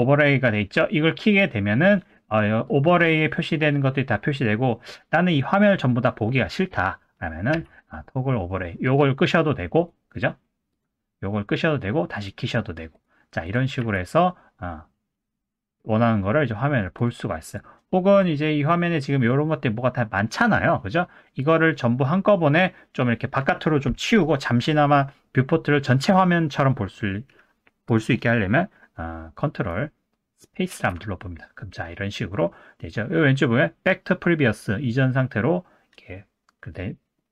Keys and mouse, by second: 2.7-4.3 drag, 7.5 z, 9.8 click, 10.7 click, 12.1 click, 13.4 click, 13.8 z, 17.5 click, 21.4 click, 27.9 click, 30.7 ctrl+space.